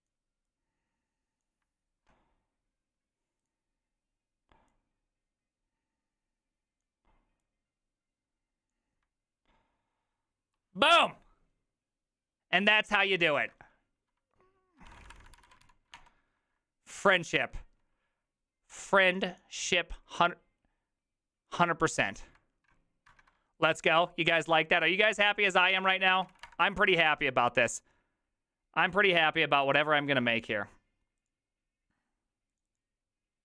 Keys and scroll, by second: 13.4 ctrl+e, 14.6-16.1 typing, 25.7-26.9 typing, 28.9 alt++.